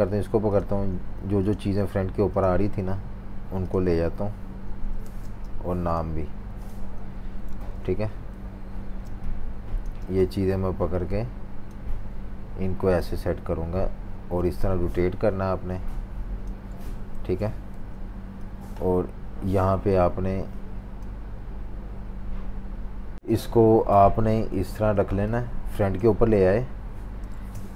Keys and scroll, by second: 0.9 super+3, 1.7 super+3, 2.6 super+3, 4.6 super+3, 5.0 typing, 6.2 super+3, 6.9 super+3, 8.8-9.8 typing, 17.1 super+g, 17.7 v, 24.9 typing.